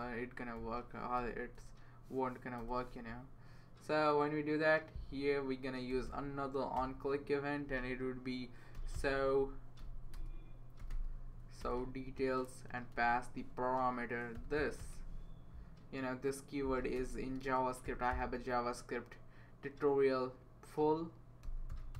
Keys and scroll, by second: 0.6 Left, 1.2 BackSpace, 1.5 BackSpace, 2.6 BackSpace, 5.6-6.5 typing, 6.7 Return, 8.5-11.3 typing, 11.6 Return, 12.4-15.4 typing, 13.6 Left, 16.9-18.6 typing, 21.2-21.9 typing.